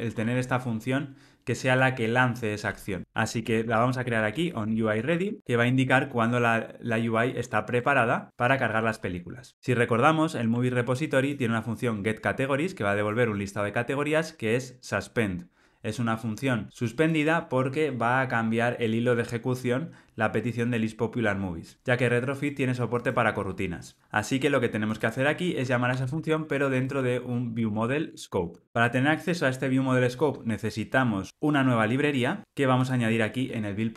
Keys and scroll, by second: 7.6 alt+super+l, 7.9 ctrl+alt+o, 10.1 super+b, 24.0 alt+super+[.